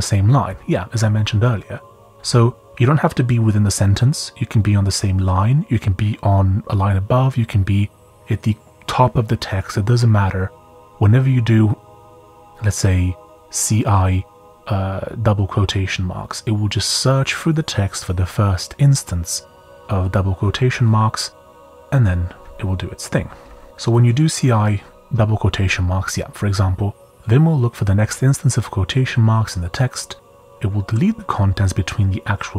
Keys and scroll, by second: 23.1 j, 23.5 j, 25.2 typing.